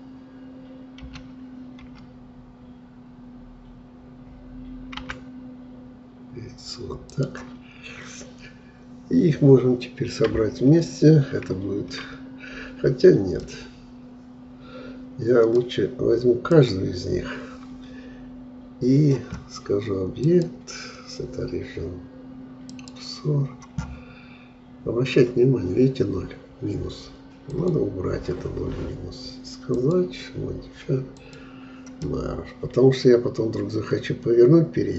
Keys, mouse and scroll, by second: 1.1 g, 13.4-16.5 middle drag, 16.6-19.6 drag, 20.2-23.3 drag, 27.5-32.1 drag, 32.1-34.9 middle drag.